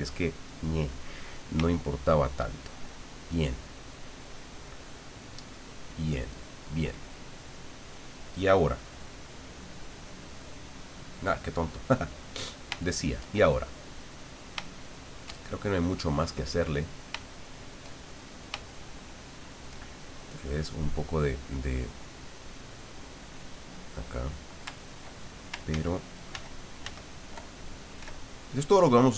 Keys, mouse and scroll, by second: 1.8 shift+middle click, 2.6 shift+middle click, 3.3-5.7 middle drag, 5.9 middle click, 8.4 click, 9.1 click, 10.8 click, 11.8 click, 12.8 shift+middle click, 13.7-17.0 middle drag, 17.2 shift+middle click, 18.3 shift+middle click, 18.7-19.9 shift+middle drag, 22.3-23.3 drag, 23.4 click, 25.7 ctrl+z, 28.0 f, 29.0 click.